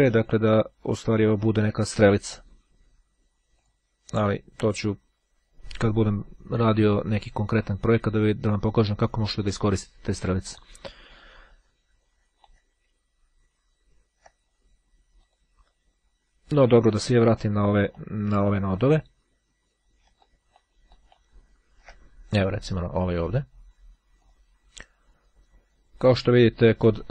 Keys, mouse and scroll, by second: 3.7 click, 4.4-6.5 drag, 10.7 middle click, 11.3-13.0 drag, 13.3-13.8 ctrl+scroll up 1, 13.8-14.3 ctrl+scroll up 1, 15.3 click, 17.3-18.5 shift+drag, 20.3 ctrl+click, 21.5-22.0 scroll down 1, 23.3 click, 24.3 click.